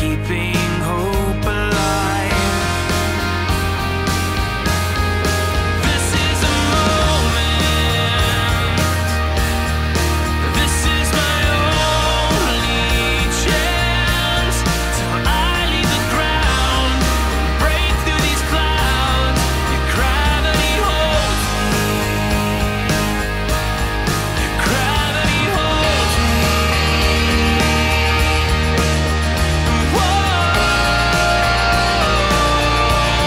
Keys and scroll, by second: 5.2 super+z, 5.6 super+z, 5.9 super+z, 7.8 super+z, 28.0 super+z.